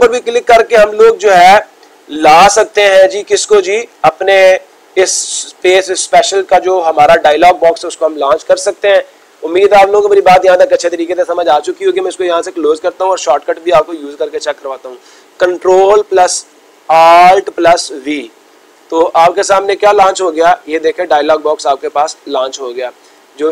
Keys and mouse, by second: 3.7-4.7 drag, 12.7-13.7 drag.